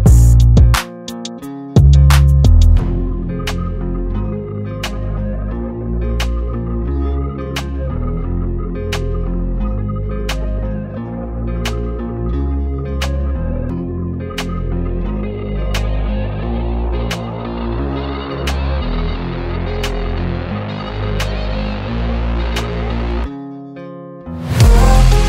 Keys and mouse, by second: 1.1 ctrl+a, 3.2 click, 10.7 click, 11.3-12.4 typing, 14.0 click, 19.0 click, 19.7 i, 20.3 click, 20.5 v, 21.5 click, 22.7 i, 23.3 click, 23.5 v, 24.2 click.